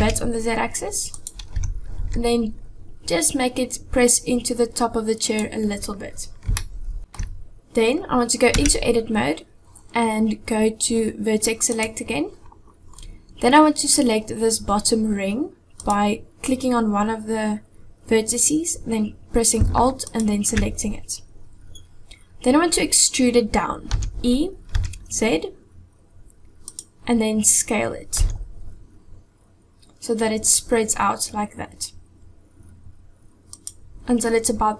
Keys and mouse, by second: 1.6 g, 6.6-7.2 shift+middle drag, 8.6 Tab, 11.8 click, 15.8 click, 20.1 alt+click, 23.9 e, 28.2 s.